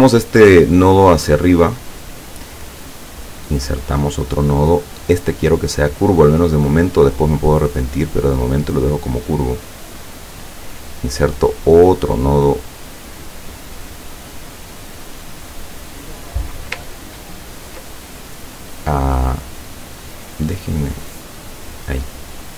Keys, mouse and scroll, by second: 3.9 click, 6.4 click, 7.6-10.7 drag, 11.8 click, 12.5 click, 13.5 click, 14.2 click, 14.8 click, 15.8 click, 16.9 ctrl+scroll up 2, 18.3 click, 20.4-22.1 drag, 22.4 click.